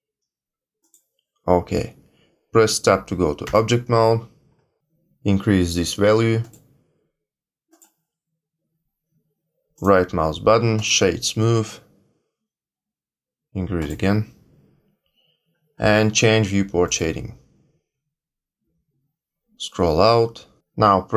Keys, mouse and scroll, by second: 3.4 Tab, 6.4 click, 7.6 click, 9.7 right click, 13.7 click, 16.9 click, 19.5-20.6 scroll down 3.